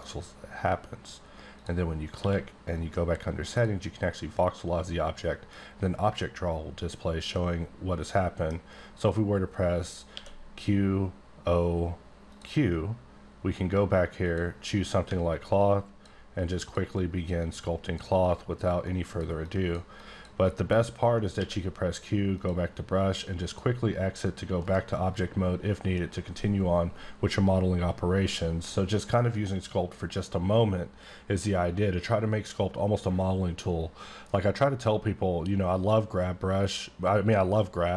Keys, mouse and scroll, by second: 1.6 click, 2.2 q, 3.5 click, 7.3 middle click, 10.1 q, 12.3 click, 14.2 click, 15.6 click, 16.4 click, 16.9 click, 17.9 click, 18.2 click, 18.8 click, 19.4 click, 20.0 click, 20.4 click, 21.4 q, 22.3 click, 23.5 click, 24.6 right click.